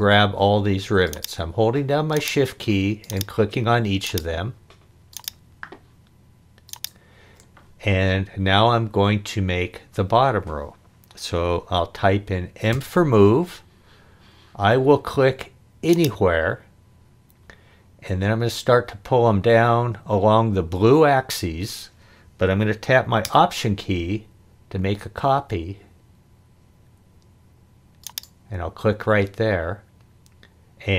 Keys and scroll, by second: 12.7 m.